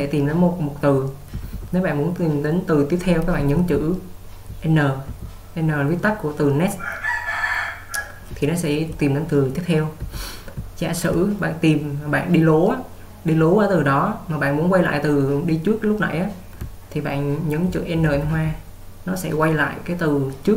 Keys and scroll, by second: 1.4 j, 3.4-5.1 typing, 8.4-8.9 typing, 10.0-11.1 typing, 13.9 typing, 17.0-18.4 typing.